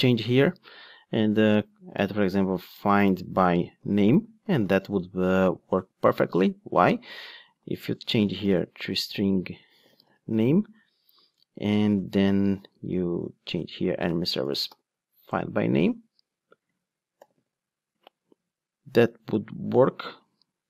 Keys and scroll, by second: 15.3 Return.